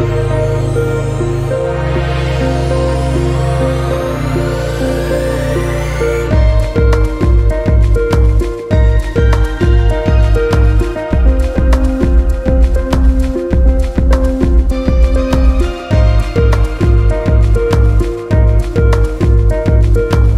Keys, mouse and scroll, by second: 3.7 click, 4.0 middle click, 4.4 scroll up 2, 4.5-5.6 middle drag, 5.6 click, 5.9 middle click, 6.7 click, 7.1-8.8 middle drag, 8.8 click, 9.0-10.8 middle drag, 10.8 click, 12.0 click, 12.6 middle click, 12.7-14.3 drag, 15.8-17.0 drag, 17.0 middle click, 17.2 click, 17.7 ctrl+z, 17.8 click, 18.7 shift+middle click, 18.9-20.3 drag.